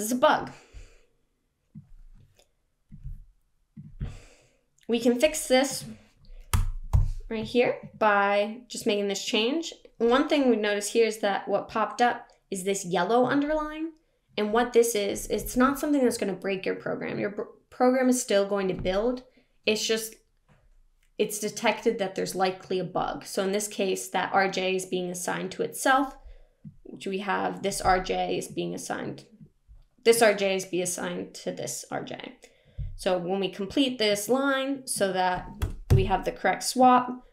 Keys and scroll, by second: 6.5 BackSpace, 35.5 BackSpace.